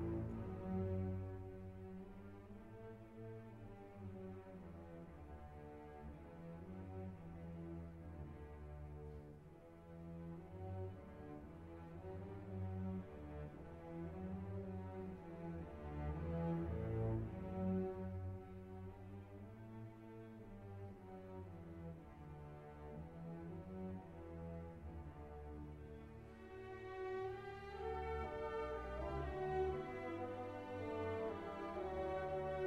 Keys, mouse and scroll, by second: 3.3 click, 6.0 click, 8.0 1, 8.3 3, 8.9 click, 10.1 3, 10.5 0, 11.3 click, 12.0 click, 13.2-14.4 drag, 15.2-16.0 drag, 16.3 1, 17.0 5, 17.7-18.7 drag, 19.1-21.1 drag, 21.3 click, 21.9 scroll down 1, 22.4 scroll up 2, 22.7-24.3 drag, 24.5 click, 25.3 middle click, 26.4 click, 27.3 ctrl+click, 28.7 click, 30.0-32.6 drag.